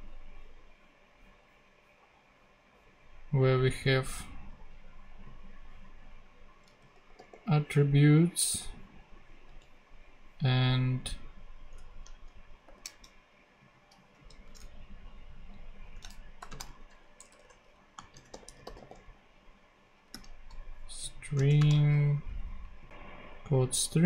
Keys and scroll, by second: 6.7 super+c, 9.5 super+v, 11.9 Left, 12.6 shift+;, 15.8-19.2 typing, 21.5 shift+;, 21.6 shift+space.